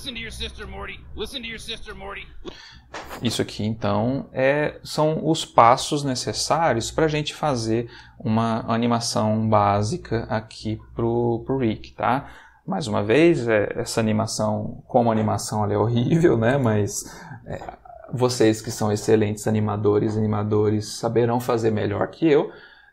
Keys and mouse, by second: 2.4 space.